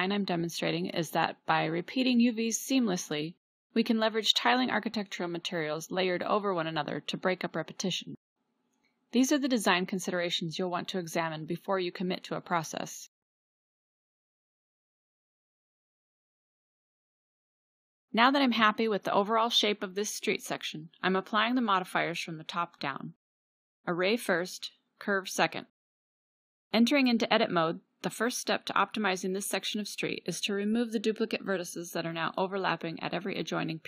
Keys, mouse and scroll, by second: 2.4-5.9 drag, 2.4 g, 6.8-9.6 drag, 7.1 g, 9.6 g, 12.2 click, 13.0 e, 14.1-14.5 middle drag, 14.6 middle click, 15.3 Tab, 16.7 middle click, 17.6-18.0 middle drag, 20.5-20.8 drag, 24.0 click, 27.3 click, 28.4 Delete, 29.5 click, 30.9 Tab, 31.7 a.